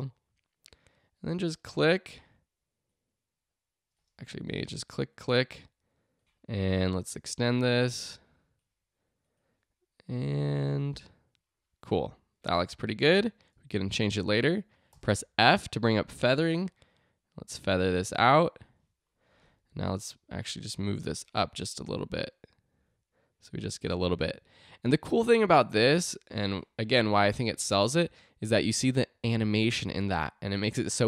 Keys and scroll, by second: 4.3 super+z, 14.7-15.4 typing, 19.3 v.